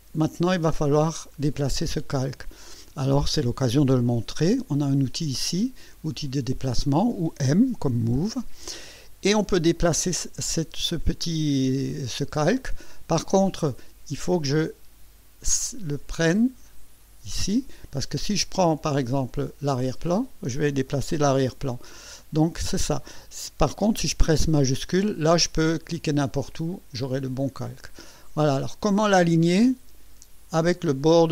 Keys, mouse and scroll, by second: 6.8 click, 8.1 m, 15.9-18.0 drag, 19.4 click, 21.7 ctrl+z, 25.3-26.7 shift+drag, 26.9-28.7 shift+drag.